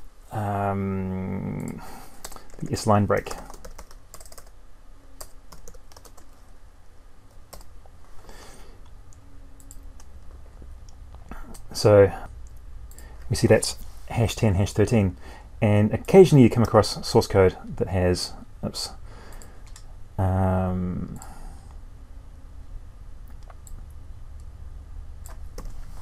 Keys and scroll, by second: 5.9 ctrl+space, 16.5 ctrl+c, 16.9 alt+Tab, 25.3 ctrl+v.